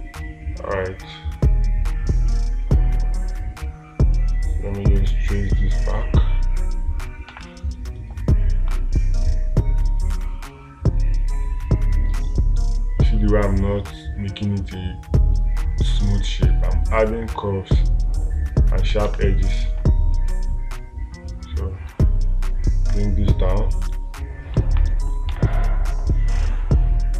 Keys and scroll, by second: 7.7 space, 19.5 space, 25.8 space.